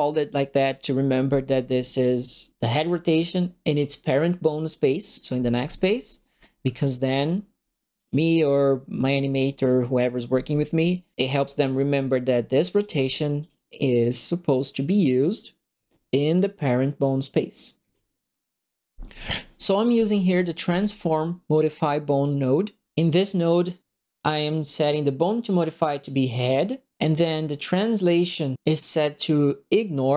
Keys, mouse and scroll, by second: 7.9 click, 12.6 click, 13.3 click, 19.1 click, 20.3 middle click.